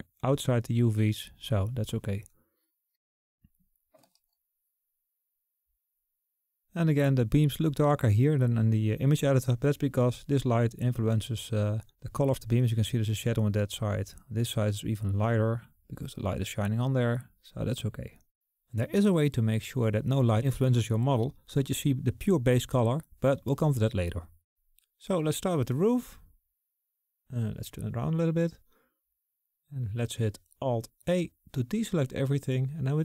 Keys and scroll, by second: 31.3 alt+a.